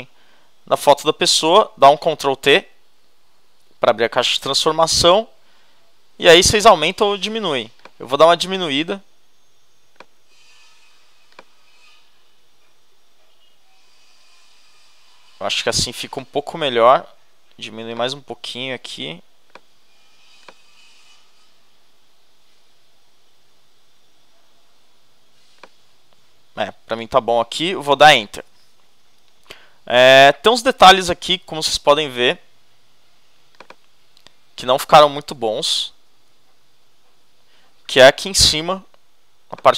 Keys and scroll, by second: 2.3 shift+super+t, 3.9 shift+super+-, 28.3 shift+Return, 30.0 shift+z.